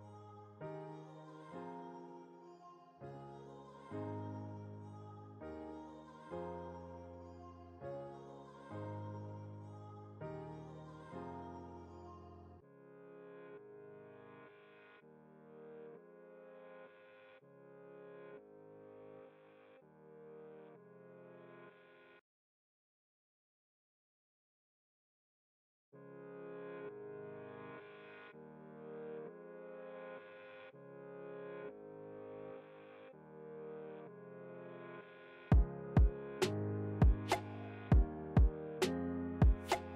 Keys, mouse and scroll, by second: 0.0-1.0 typing, 1.6 Return, 3.3 alt+scroll up 1, 5.3-6.8 drag, 14.0 ctrl+z, 14.5 click, 15.9 ctrl+t, 17.2 alt+shift+click, 20.0 Return, 22.8 Return, 23.1-33.0 drag, 37.8 typing, 38.0 click, 38.3 click, 39.9 typing.